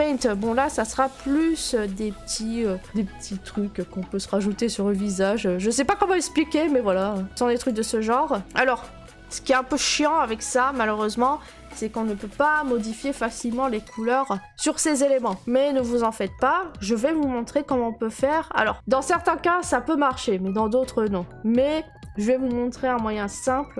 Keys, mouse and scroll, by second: 1.6 click, 2.6 right click, 5.3 click, 6.1 click, 6.9 click, 7.3 click, 7.6 click, 8.0 middle click, 8.1 middle click, 8.4 click, 8.4 middle click, 15.2 click, 16.0 click, 17.0 middle click, 17.1 middle click, 17.1 middle click, 18.2 click, 18.7 click, 20.4 scroll.